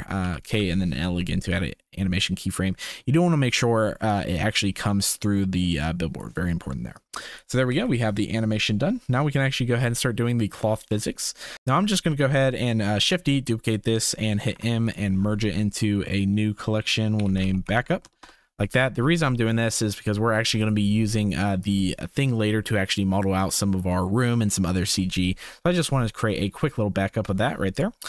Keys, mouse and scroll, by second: 0.2 k, 1.5-3.5 drag, 4.1-6.2 drag, 6.9 click, 7.7 ctrl+s, 10.8 click, 13.0 shift+d, 14.5 m, 18.2 Return, 20.6 click, 27.7 click.